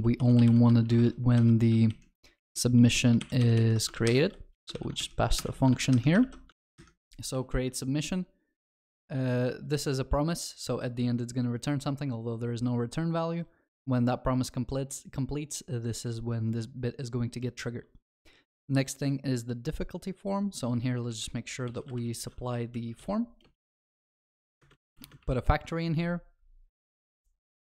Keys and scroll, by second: 4.0 ctrl+x, 5.4 ctrl+y, 6.2 ctrl+alt+shift+l, 6.5 ctrl+s, 7.4 ctrl+b.